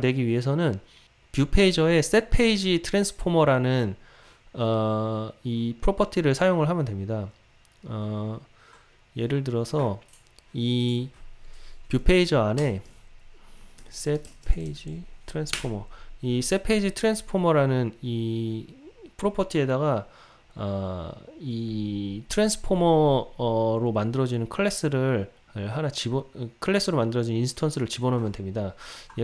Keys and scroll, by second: 15.7 Return.